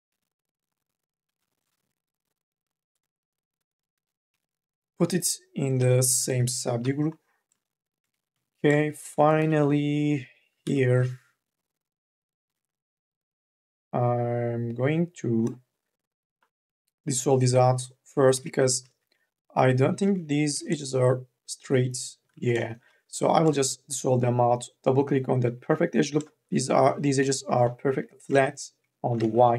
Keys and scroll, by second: 1.6 e, 4.1 t, 4.6 ctrl+z, 6.6 t, 8.2 q, 9.1 2, 9.3 e, 10.4 2, 10.9 e, 18.1 m, 18.5 n, 20.2 t, 23.2 m, 23.6 n, 25.4 m, 25.8 o, 27.0 t, 28.4 ctrl+z, 29.3 ctrl+z.